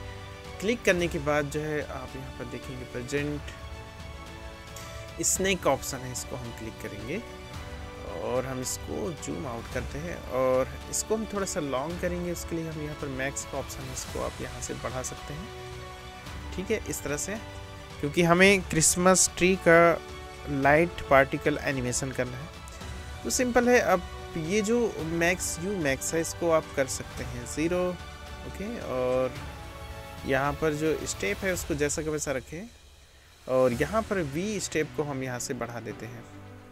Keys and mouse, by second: 6.1-36.7 middle drag.